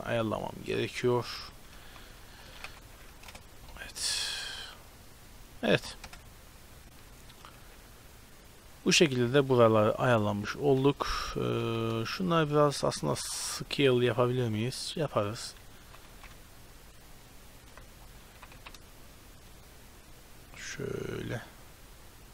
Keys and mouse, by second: 0.8-1.3 drag, 1.7 shift+d, 2.5 r, 3.7-5.6 middle drag, 6.2 KP_0, 7.6 z, 8.9 z, 10.1-10.9 drag, 10.9 z, 11.0 click, 11.7 middle click, 11.7 z, 12.2-15.0 middle drag, 13.3 ctrl+s, 14.1 s, 15.9 g, 18.3 g.